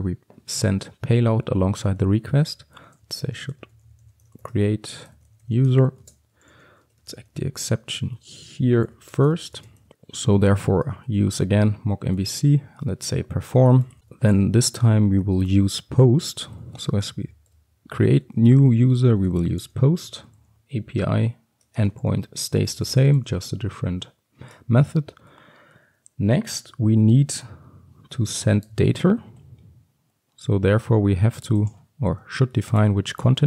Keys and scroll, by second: 7.0 Return, 10.5 Return, 12.4 Return, 27.2 Tab, 28.8 Tab.